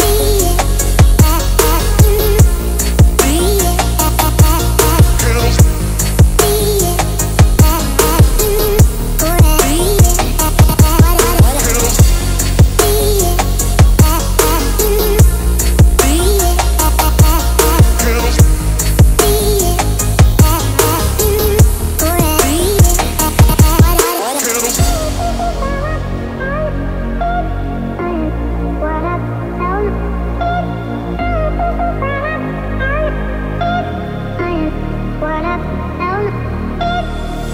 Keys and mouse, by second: 0.6 a, 1.5 alt+s, 4.1 Tab, 4.7-5.2 drag, 5.6 ctrl+s, 6.0 a, 6.1 a, 6.7-7.6 drag, 8.2-8.7 drag, 9.2 shift+click, 9.6 click, 10.2 click, 11.6 shift+a, 14.7 w, 16.9 middle click, 17.5 a, 18.5 ctrl+p, 21.0-22.1 middle drag, 22.8-23.2 middle drag, 24.1 click, 24.5 Tab, 26.1 KP_7, 27.1 alt+z, 27.7 click, 29.9 click, 33.6 Tab, 34.0 ctrl+s, 34.3 a, 34.4 a, 34.7 alt+z, 35.2-35.6 middle drag, 36.2 click, 37.0 g.